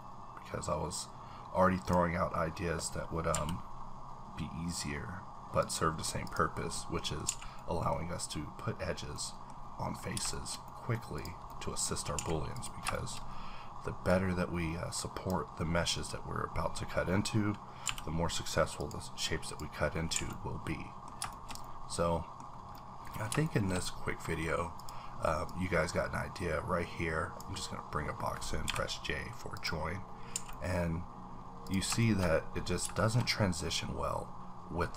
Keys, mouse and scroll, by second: 3.3 b, 6.2 click, 6.7-10.3 middle drag, 9.9 scroll down 1, 10.6 shift+middle click, 11.1 click, 11.5 middle click, 12.1 a, 12.5 click, 12.9 shift+middle click, 13.2-14.1 scroll up 3, 14.4-15.3 drag, 17.8 b, 19.4 click, 19.9 scroll down 3, 20.1 a, 20.3 middle click, 21.3-22.7 shift+middle drag, 22.5 scroll up 1, 22.8 scroll down 2, 23.4-25.5 shift+middle drag, 24.8 click, 25.5-29.6 drag, 28.6 j, 30.1 scroll down 1, 30.3 a, 30.5 middle click, 30.7-31.6 scroll up 1, 31.6 click, 32.0 shift+middle click, 32.2-32.8 shift+scroll up 3, 33.0 shift+middle click, 33.2 shift+scroll up 1, 34.8-34.9 scroll up 1.